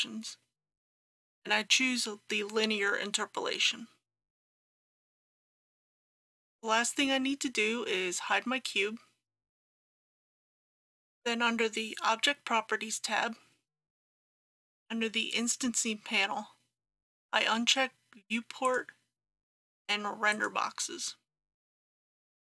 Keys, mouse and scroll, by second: 4.8 click.